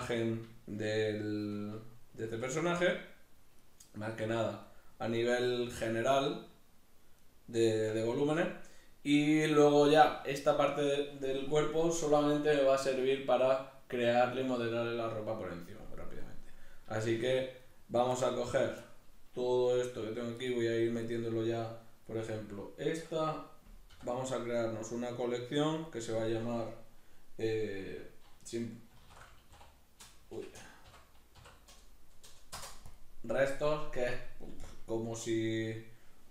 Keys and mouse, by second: 0.6-3.8 shift+middle drag, 2.2 g, 3.8 right click, 4.1 g, 4.8 right click, 5.5 g, 7.3 right click, 8.1-8.7 shift+middle drag, 8.7 right click, 17.0-17.6 shift+middle drag, 17.6 right click, 18.2-21.0 shift+middle drag, 21.0 right click, 23.9 m.